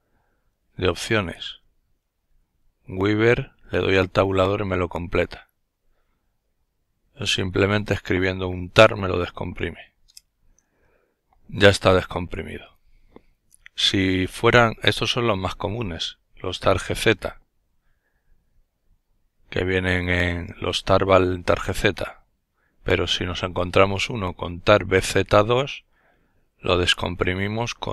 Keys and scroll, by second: 0.0-1.9 typing, 3.2 Tab, 9.6 Return.